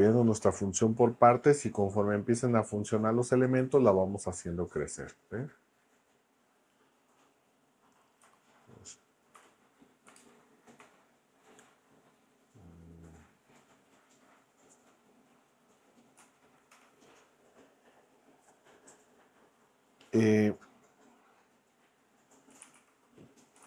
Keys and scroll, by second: 8.2 BackSpace, 9.3 n, 10.1 ', 10.2 space, 10.8 1, 16.2 Right, 16.7 Return, 22.2-23.6 typing.